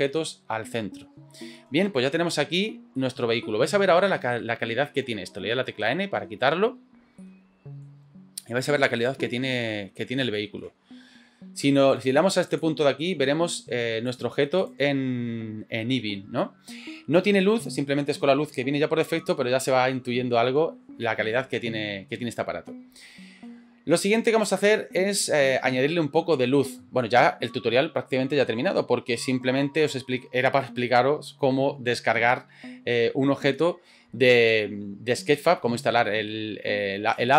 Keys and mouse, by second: 1.6 middle drag, 3.0-3.3 middle drag, 3.5 shift+middle click, 4.2 shift+middle click, 5.8 n, 7.3 shift+middle click, 8.9 shift+middle drag, 9.3 middle click, 10.4 shift+middle click, 12.9 click, 14.1 click.